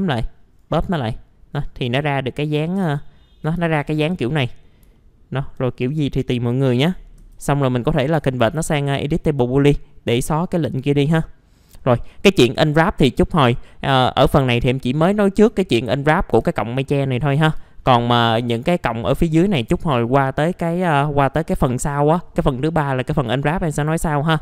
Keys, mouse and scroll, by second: 1.0 alt+middle click, 2.1 alt+middle click, 2.9 alt+middle click, 4.3 typing, 4.9 alt+middle click, 5.7-6.9 scroll down 1, 7.2 ctrl+shift+g, 8.2 F4, 8.7 alt+middle click, 9.3-11.0 scroll up 1, 11.2-11.6 scroll down 1, 11.6-11.9 scroll up 1, 11.9 click, 13.5 middle click, 14.4 click, 14.9 alt+middle click, 15.5-16.3 scroll up 1, 16.4 F4, 16.9-17.4 scroll down 1, 17.4 F4, 18.4 click, 19.0 middle click, 19.3 scroll down 1, 19.6 F4, 23.8 scroll down 1, 24.1 middle click.